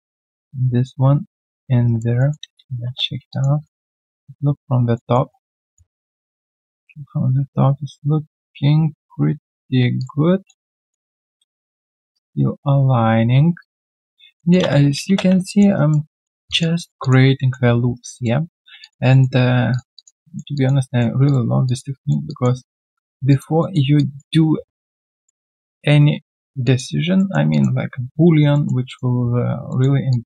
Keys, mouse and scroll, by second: 1.4 ctrl+click, 1.8 alt+right click, 2.1 alt+middle click, 2.4 space, 2.8 space, 3.3 alt+click, 3.6 alt+middle click, 4.0 alt+right click, 4.9 alt+middle click, 9.9 ctrl+click, 10.4 alt+middle click, 13.6 ctrl+click, 14.0 alt+right click, 14.6 space, 15.4 alt+click, 15.7 alt+right click, 16.1 alt+middle click, 16.4 alt+click, 16.7 alt+right click, 17.0 alt+click, 17.3 alt+middle click, 17.8 q, 17.9 right click, 18.4-18.8 scroll down 1, 18.8 alt+click, 19.1 alt+middle click, 19.9 alt+click, 20.2 alt+middle click, 20.5 alt+click, 20.8 alt+middle click, 21.6 alt+click, 22.0 alt+middle click, 22.2 alt+click, 22.6 alt+middle click, 23.3 alt+click, 23.6 alt+middle click, 23.9 alt+click, 25.0 alt+middle click, 25.9 alt+right click, 26.2 alt+middle click, 26.6 alt+click, 27.1 alt+middle click, 27.5 alt+click, 28.5 alt+middle click, 28.9 alt+click, 29.6 alt+middle click, 30.1 alt+click.